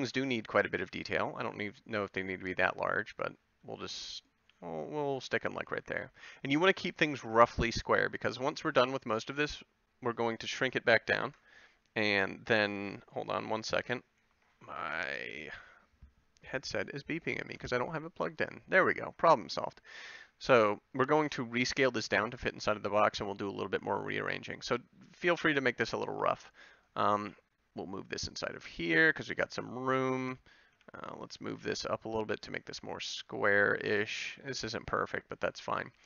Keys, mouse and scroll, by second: 0.1 b, 1.9 g, 3.5 s, 4.4 g, 6.0 a, 25.4 click, 26.1 b, 27.2 g, 28.9 a, 31.3 b, 31.6 g, 34.0-35.1 drag, 34.2 a.